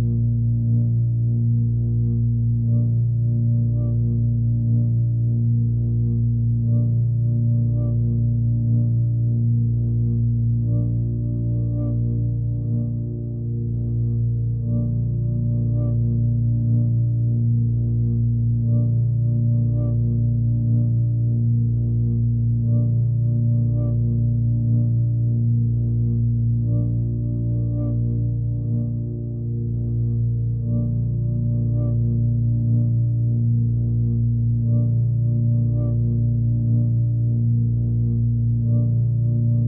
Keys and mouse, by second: 0.0-0.5 alt+middle drag, 1.3 shift+d, 2.1 s, 3.6 shift+d, 4.5 s, 5.6 shift+d, 6.6 s, 7.9 shift+d, 9.6 s, 11.1 shift+d, 13.0-13.8 alt+middle drag, 14.0-14.5 alt+middle drag, 15.1-16.6 alt+middle drag, 17.3 click, 19.3 drag, 21.4 click, 22.0 click, 22.4 click, 22.7 click, 23.1 click, 23.3 click, 23.8 click, 24.7 Tab, 25.6 alt+middle click, 26.5 alt+middle click, 29.9 Tab, 31.5 click, 32.2-35.1 drag, 36.2-36.9 drag, 37.6-39.6 drag.